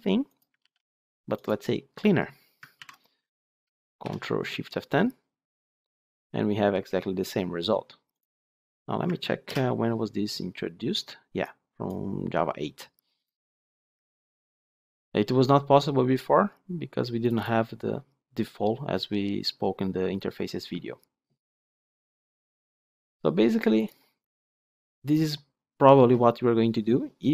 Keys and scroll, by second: 0.5 ctrl+v, 2.7 ctrl+/, 4.0 ctrl+shift+F10, 9.4 ctrl+b.